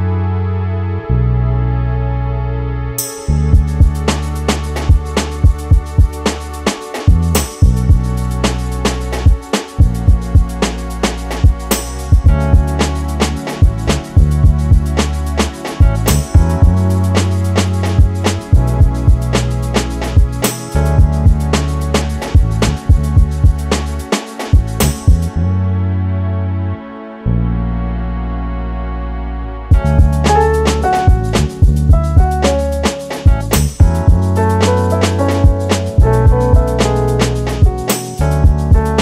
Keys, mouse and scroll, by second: 2.1 middle click, 2.5-3.0 scroll up 1, 3.0-3.3 scroll down 1, 3.3 scroll down 5, 4.2 middle click, 4.5-5.0 scroll up 5, 5.1 scroll down 4, 6.1-6.6 scroll up 3, 6.6-6.9 scroll down 7, 6.9 middle click, 7.6-8.1 scroll up 3, 7.9 middle click, 8.9 KP_7, 9.4-9.9 scroll up 5, 10.0-10.6 scroll down 3, 10.6 middle click, 11.3-11.7 scroll up 4, 11.7 middle click, 12.1 scroll down 2, 12.3 middle click, 13.7 scroll up 2, 14.0 middle click, 15.4 shift+middle click, 15.7-16.0 scroll up 2, 16.0 scroll down 1, 16.1-16.9 scroll down 9, 16.9 middle click, 17.7-18.2 scroll up 2, 19.0 click, 20.6 click, 21.5 click, 22.0 click, 23.5 shift+middle click, 23.9-24.6 scroll up 8, 24.6 shift+middle click, 25.1-25.9 scroll down 3, 26.0 Tab, 26.3-26.7 scroll down 2, 26.7 Tab, 26.8 click, 27.0 Tab, 27.7 shift+middle click, 28.0-28.3 scroll up 4, 28.7 Tab, 29.6 scroll down 1, 29.9 Tab, 30.2 scroll up 2, 30.6 scroll down 6, 30.7 shift+middle click, 30.9-32.0 scroll up 3, 31.4 Tab, 32.0-32.5 scroll down 4, 32.7 click, 33.3 click, 33.5 click, 33.8-34.2 scroll up 4, 34.1 click, 34.2 Tab, 34.8-35.5 scroll down 4, 35.0 Tab, 35.8 Tab, 36.1 click, 36.6 click, 36.8 Tab, 37.1 click, 37.3 scroll down 5, 37.5-38.0 scroll up 10, 38.3 scroll down 1, 38.5 middle click.